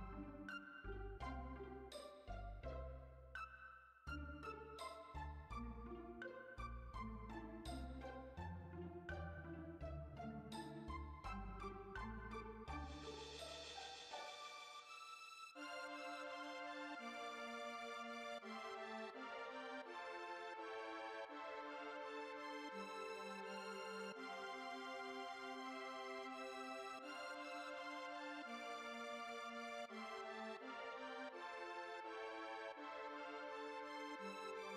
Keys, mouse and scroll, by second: 0.6 click, 2.2 space, 5.2-9.7 drag, 9.7 0, 9.8 0, 12.8-14.3 drag, 14.3 0, 24.1-28.8 drag, 31.7-34.7 scroll up 1.